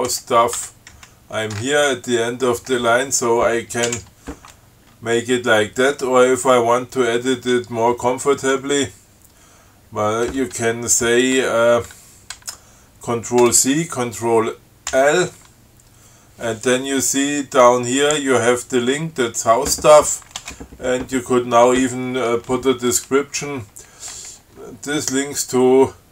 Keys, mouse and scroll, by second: 0.3 Left, 0.8 f, 1.2 Right, 4.1 alt+9, 13.7 ctrl+c, 15.2 ctrl+l, 20.6 Return.